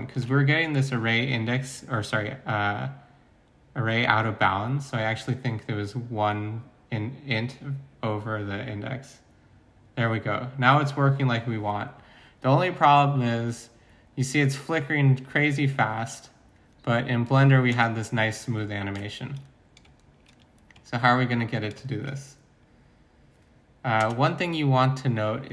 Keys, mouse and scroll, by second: 0.1 ctrl+s, 17.7-20.3 middle drag.